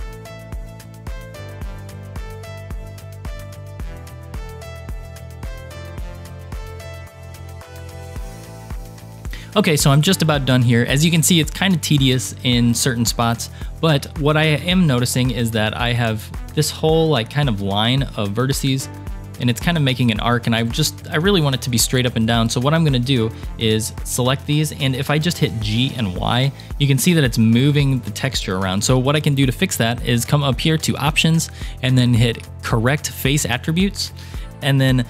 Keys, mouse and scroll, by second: 0.0-0.9 typing, 0.0 click, 0.3 click, 0.5 click, 0.9 shift+middle click, 1.0 ctrl+r, 1.2 ctrl+r, 1.5 shift+middle click, 1.6 ctrl+r, 1.9 ctrl+r, 2.2 ctrl+r, 2.5 click, 2.7-4.7 typing, 3.1 click, 3.2 shift+click, 3.4 click, 3.5 shift+click, 3.6 click, 4.1 click, 4.6 shift+click, 5.7 ctrl+r, 6.0 ctrl+r, 6.3 ctrl+r, 6.5 ctrl+r, 6.8 1, 6.8 click, 6.9 g, 7.5 click, 7.5 g, 8.3 ctrl+r, 8.4 scroll down 2, 8.5 scroll up 3, 11.2 scroll down 2, 15.6 click, 16.4-17.5 drag, 23.3-24.4 drag, 25.4 g, 31.3-33.6 drag, 34.2-34.5 scroll up 3.